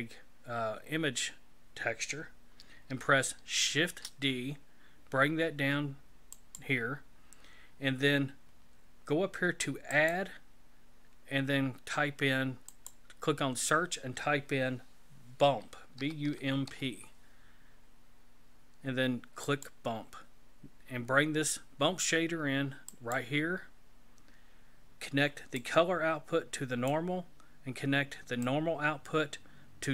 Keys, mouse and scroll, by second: 3.7 shift+d, 9.9 click, 25.6 click, 28.4 click.